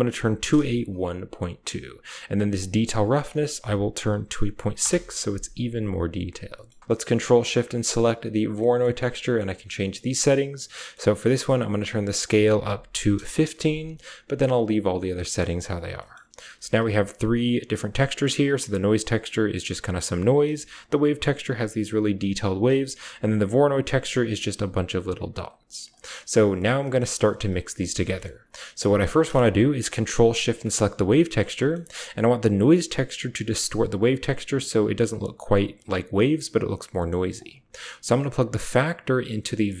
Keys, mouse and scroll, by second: 2.4-4.6 drag, 7.2 ctrl+shift+click, 7.3 typing, 10.7 click, 11.9-13.0 drag, 15.4 click, 16.0 click, 16.2-18.5 typing, 16.6 ctrl+shift+click, 17.2 ctrl+shift+drag, 17.6 ctrl+shift+click, 18.2 ctrl+shift+click, 20.6 ctrl+shift+click, 22.8-23.6 typing, 23.0 ctrl+shift+click, 25.2-26.0 typing, 25.4 click, 25.8 drag, 26.8 drag, 27.0 click, 27.5-28.3 typing, 28.0 click, 30.1-31.2 typing, 30.3 ctrl+shift+click, 30.5 click, 32.3-33.1 typing, 32.4 click, 33.5 click, 36.8-37.3 drag, 38.2 click, 38.7-39.7 drag, 38.7-39.8 typing.